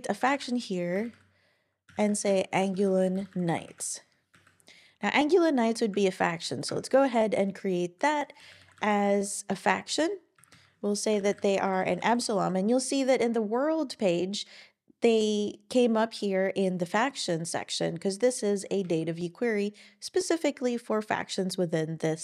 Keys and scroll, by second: 0.3-4.8 typing, 8.3-9.6 typing, 10.3 Down, 10.5 Down, 10.9-12.2 typing, 13.8-14.6 typing.